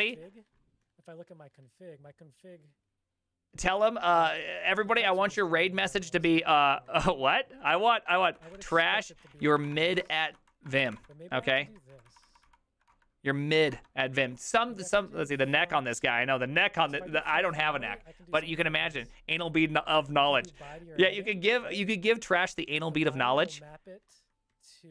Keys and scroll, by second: 8.1-11.7 typing, 11.7 ctrl+a, 11.9 ctrl+c, 12.1 ctrl+v, 12.3 ctrl+v, 12.5 ctrl+v, 12.9 Return, 13.6 ctrl+v, 13.7 Return.